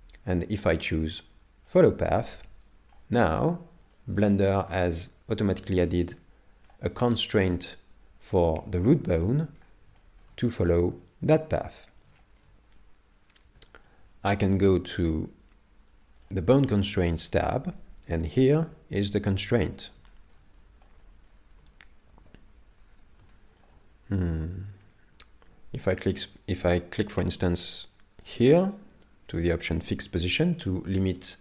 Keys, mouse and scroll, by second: 2.9 shift+middle click, 3.5 middle click, 4.3 shift+middle click, 4.7 middle click, 6.8 middle click, 9.2 middle click, 10.0 shift+middle click, 12.2 middle click, 16.2 click, 20.1 shift+middle click, 20.9 middle click, 22.2 KP_7, 22.8-23.2 scroll down 4, 23.3 shift+middle click, 28.3 click, 30.6 shift+middle click.